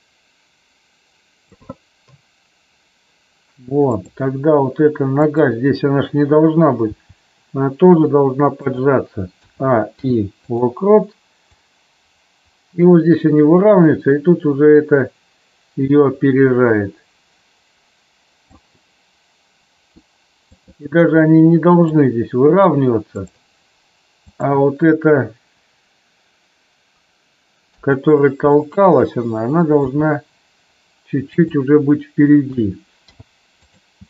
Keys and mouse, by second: 3.9 click, 6.9 g, 9.3 a, 9.9 i, 11.5-18.5 drag, 20.4 click, 21.2-21.9 middle drag, 23.2 click, 24.3 click, 27.6 KP_3, 29.9 g, 31.3 click, 32.4 a, 32.9 i.